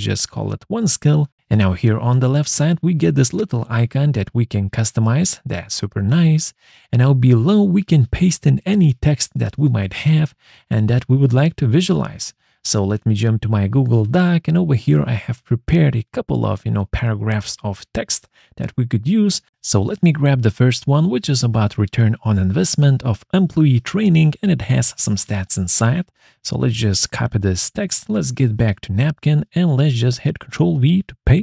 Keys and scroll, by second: 24.4 ctrl+c.